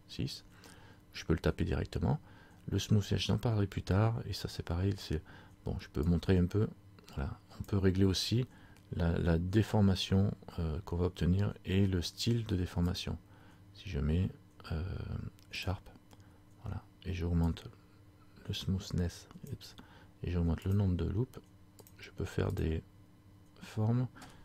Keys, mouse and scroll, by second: 6.2 click, 12.9 click, 17.6 click, 20.8 click.